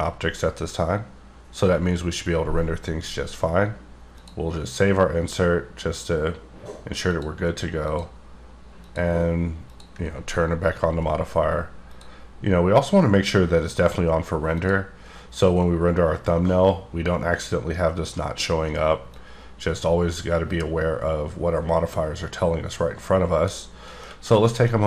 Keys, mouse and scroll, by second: 4.2 click, 7.0 click, 7.8 click, 8.8 click, 9.7 click, 11.8 click, 14.6 click, 19.0 click, 24.0 middle click, 24.3 scroll down 3, 24.6 shift+middle click.